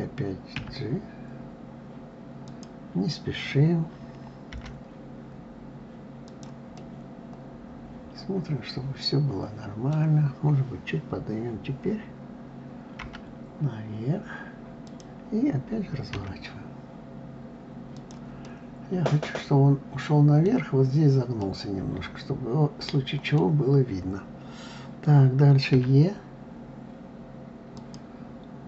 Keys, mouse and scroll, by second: 0.2 e, 6.4-9.5 middle drag, 18.0-24.0 middle drag.